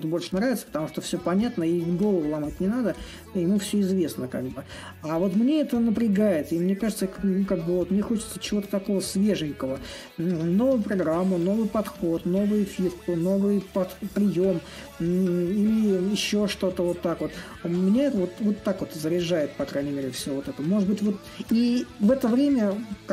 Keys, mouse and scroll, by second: 0.0-5.0 drag, 5.5-10.5 drag, 13.1 click, 14.8-18.4 shift+drag, 19.2-23.1 drag.